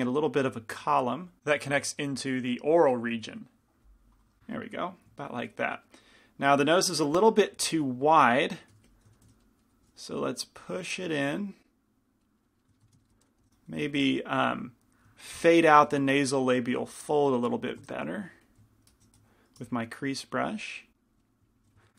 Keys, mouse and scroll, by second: 8.9 g, 8.9 f, 13.5 shift+f, 15.9 f, 16.8 f, 18.1 shift+f, 19.4-21.9 drag, 19.4 shift+c, 19.4 f, 21.3 middle click, 21.7 f.